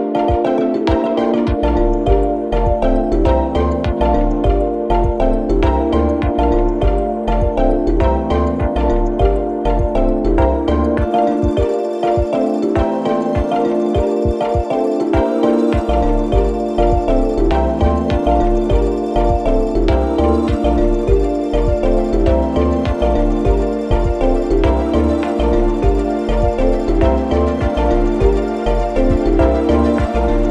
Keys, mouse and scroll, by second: 24.1 right click, 25.6-30.5 drag.